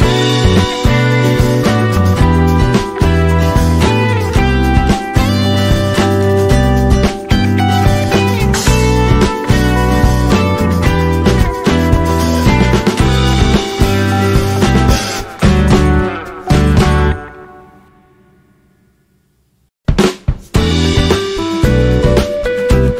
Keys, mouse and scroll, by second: 0.7-3.0 drag, 3.0-3.7 scroll down 3, 4.7-6.3 drag, 5.2-6.3 drag, 7.9 alt+scroll up 1, 8.4 click, 10.1-15.7 drag, 12.8 shift+Num_Lock, 15.7 Up, 17.5 Left, 17.8 Down, 18.9 click, 22.5 alt+click.